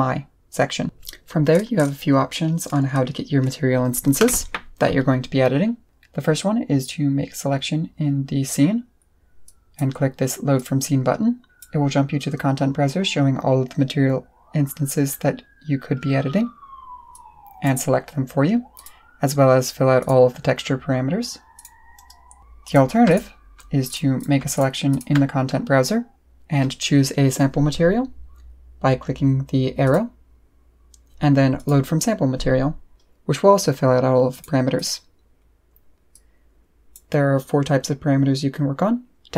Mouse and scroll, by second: 9.4 click, 10.5 click, 11.5 click, 17.1 click, 18.7 click, 20.0 click, 21.5 click, 22.6 click, 23.1 click, 23.9 click, 24.2 click, 24.5 click, 24.9 click, 29.8 click, 31.5 click, 34.3 click, 34.7 click, 36.1 click.